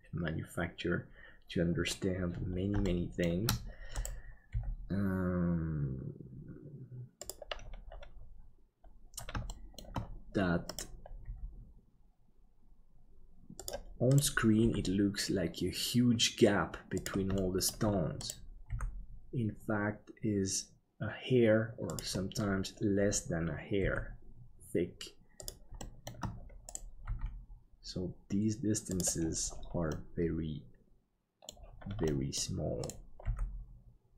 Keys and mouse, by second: 2.8 shift+middle click, 4.5 g, 9.5 shift+middle click, 11.2 g, 14.5 g, 17.4 shift+middle click, 18.6 g, 23.8 g, 25.7 middle click, 30.0-31.5 middle drag, 32.1 middle click, 32.8 right click, 33.2 g.